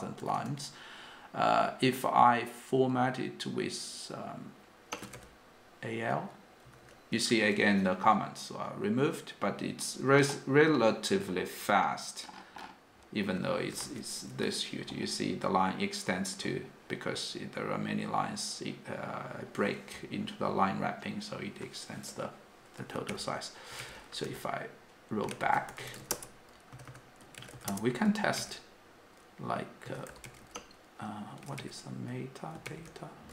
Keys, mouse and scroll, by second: 0.4 g, 5.0-6.9 typing, 13.9 shift+g, 24.2 u, 26.4-28.2 typing, 26.5 Return.